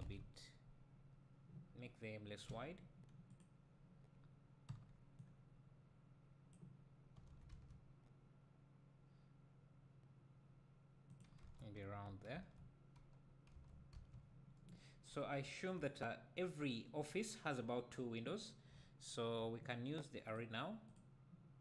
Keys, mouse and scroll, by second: 3.3 click, 4.7 b, 7.3 s, 11.1 click, 11.4 Tab, 13.6 Tab, 13.9 z, 15.0-15.4 scroll up 2, 15.4 `, 18.5 scroll down 2, 18.8 `, 20.3-21.6 drag.